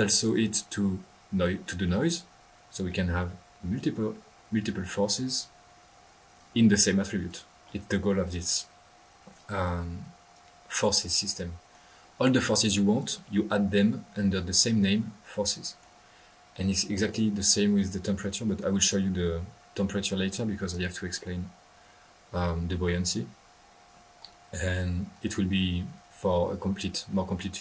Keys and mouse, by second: 0.1 drag, 0.7-1.3 drag, 1.8 middle click, 2.8 middle click, 5.1-6.5 drag, 7.2 click, 8.2-9.4 drag, 9.5 click, 11.2 middle click, 12.9 click, 15.6 middle click, 16.5 click, 17.6 click, 18.7-19.0 drag, 20.6 click, 21.0 drag, 24.1-25.2 drag.